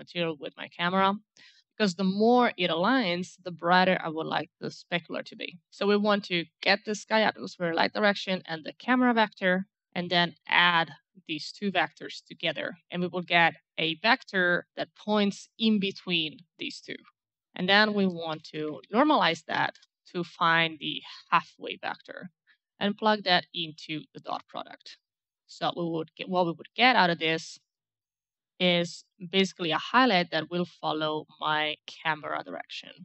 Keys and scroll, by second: 7.6-8.7 typing, 17.9-19.6 typing, 19.7 Return.